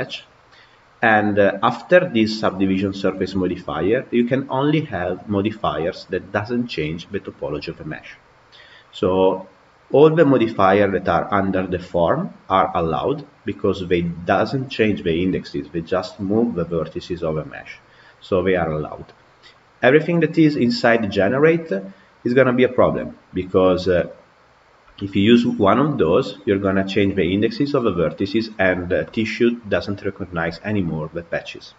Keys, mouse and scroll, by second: 9.0-12.0 drag.